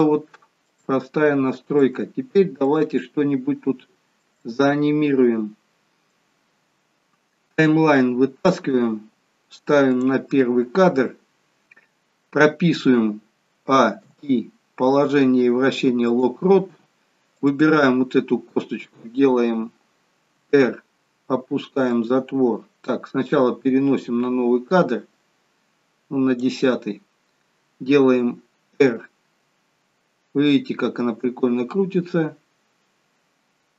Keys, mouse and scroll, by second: 0.1 shift+middle click, 0.8 shift+scroll down 1, 1.2 scroll up 1, 1.9 middle click, 1.9 scroll up 1, 3.0 middle click, 4.5 middle click, 7.8 click, 11.6 scroll up 2, 13.7 a, 17.5 click, 20.4 r, 26.7 click, 28.8 r.